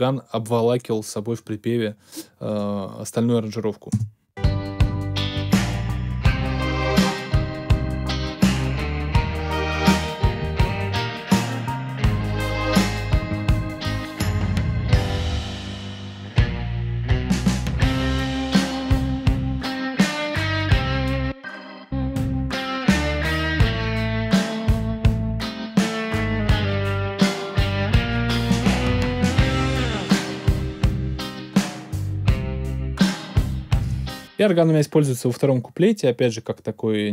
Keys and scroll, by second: 3.9 space, 33.8 space.